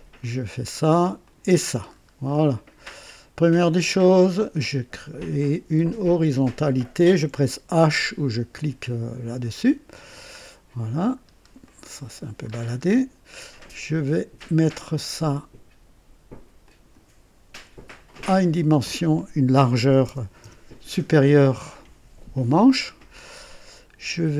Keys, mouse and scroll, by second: 0.1 click, 1.2 click, 1.9 scroll up 2, 2.2-2.8 right drag, 2.9 right click, 4.3 click, 6.4 click, 9.5 h, 10.4-11.1 scroll down 2, 11.2 scroll up 1, 11.6-12.4 right drag, 12.4 scroll up 1, 12.8-13.4 scroll down 1, 14.6 click, 16.6 click, 18.1 click, 19.7 KP_2, 20.0 KP_0, 20.4 KP_Enter, 20.4 Return.